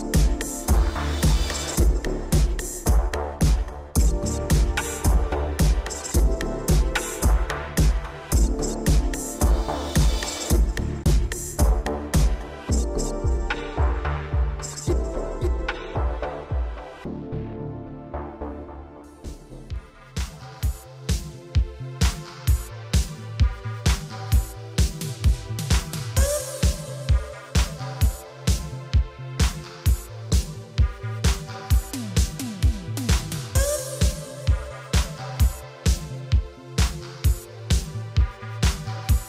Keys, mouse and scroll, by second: 1.1 click, 1.2 click, 2.8 Right, 5.0 Down, 5.6 Up, 6.3 Up, 6.3 7, 7.3 Down, 7.9 Up, 9.2 g, 11.2 click, 11.3 click, 11.6 middle click, 12.9 Down, 13.4 Up, 13.5 scroll down 1, 13.8 scroll, 14.1 scroll down 1, 14.2 scroll, 14.2 shift+space, 14.8 scroll down 1, 15.2 Escape, 15.6 middle click, 15.9 shift+space, 17.0 Escape, 17.6 shift+space, 19.4 Escape, 20.1-20.5 scroll down 2, 20.6 ctrl+s, 20.9 middle click, 21.2 a, 21.6 shift+space, 24.3 middle click, 26.1 scroll down 3, 26.7 shift+middle click, 29.4 click, 29.5 click, 30.1 middle click, 35.4 Escape, 37.1 click.